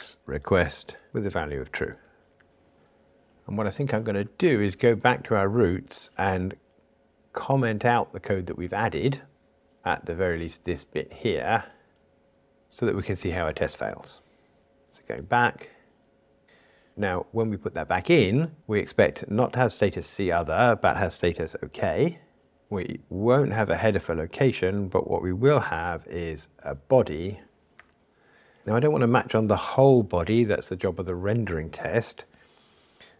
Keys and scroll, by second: 12.6 super+/, 15.2 super+e, 24.3 alt+shift+Right.